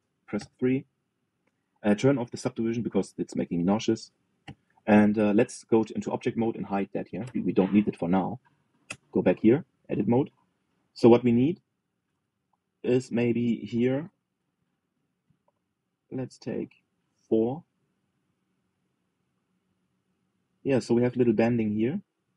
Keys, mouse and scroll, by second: 0.4 middle click, 1.0 KP_3, 1.8-3.5 shift+middle drag, 3.5 click, 4.2 middle click, 5.1 KP_3, 6.1 Tab, 6.8 click, 8.0 h, 8.9 click, 9.6 Tab, 11.6 click, 12.8 alt+z, 13.3 click, 14.6 ctrl+b.